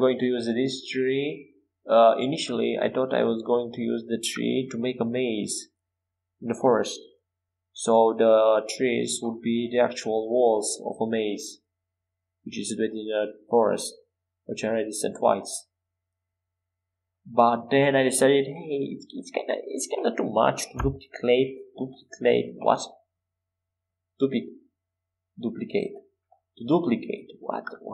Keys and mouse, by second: 0.5 e, 1.9 s, 4.2 e, 4.6 s, 7.5 e, 10.6 s, 11.2 s, 13.3 e, 18.8 e, 19.5 s, 22.4 e, 23.2 s, 25.8 e.